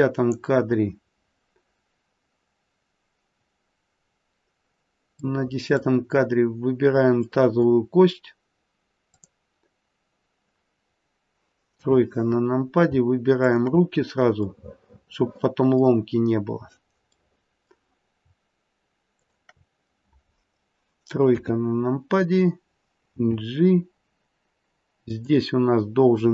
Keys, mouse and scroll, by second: 5.2 middle click, 5.7 middle click, 7.2 middle click, 7.2-8.6 scroll up 1, 9.0 click, 11.7 KP_3, 13.3 shift+click, 14.8 middle click, 15.5 middle click, 17.1 middle click, 19.0 shift+click, 21.3 KP_3, 23.0 scroll down 1, 23.1 g.